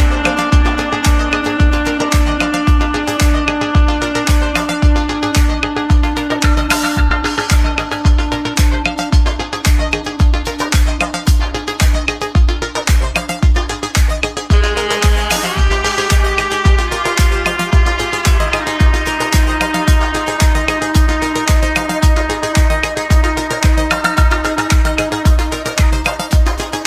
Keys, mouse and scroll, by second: 1.1 shift+d, 2.6 s, 5.5-5.9 scroll up 1, 5.9 shift+middle click, 6.6 g, 13.8 shift+middle click, 14.7 e, 15.9-17.0 middle drag, 17.0-19.4 drag, 19.4 Tab, 19.9-21.9 drag, 24.7 g, 26.6 g.